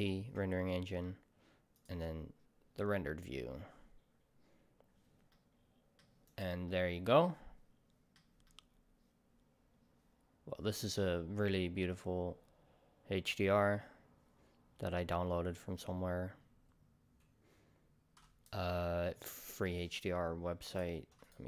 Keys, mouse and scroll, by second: 5.3-6.3 middle drag, 6.3-6.7 drag, 6.7-21.3 middle drag, 21.4 middle drag.